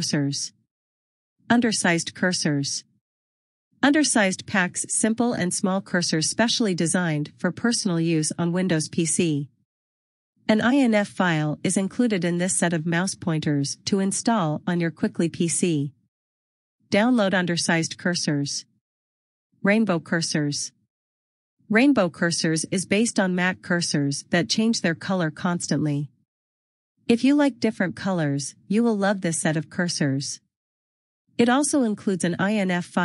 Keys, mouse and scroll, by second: 1.3 click, 8.4 click, 15.9 click, 23.4 click.